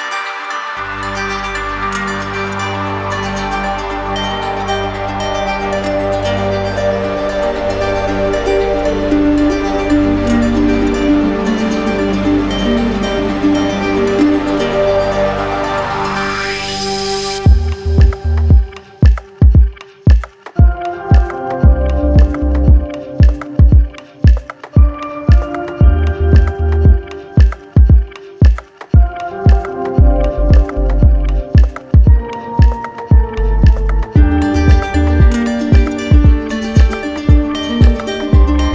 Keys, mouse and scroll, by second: 0.6 click, 2.4 click, 2.9 d, 3.2 d, 6.6-7.6 right drag, 14.1-15.1 drag, 16.2 click, 35.4 click, 35.6 ctrl+z, 36.2 ctrl+z, 36.4 ctrl+z, 36.7 ctrl+z.